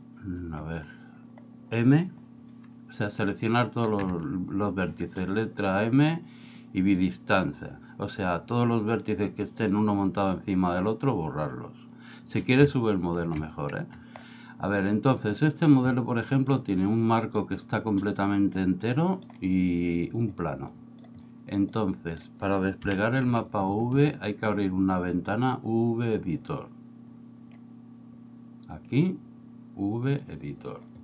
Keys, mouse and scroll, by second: 4.0 m, 14.4-15.4 middle drag, 15.9 middle click, 18.7 middle click, 20.8 middle click, 22.9 KP_1, 23.8 middle click, 25.8 click, 27.2 click, 28.8-30.2 drag.